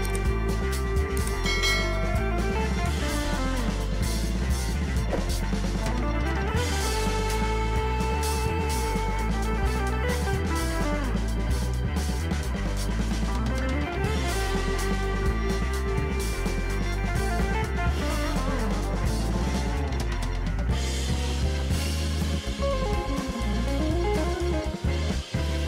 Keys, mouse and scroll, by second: 0.0 Delete, 1.4 ctrl+d, 9.4 shift+click, 17.3 ctrl+t, 18.2 alt+shift+click, 21.2 ctrl+a, 23.9 ctrl+d.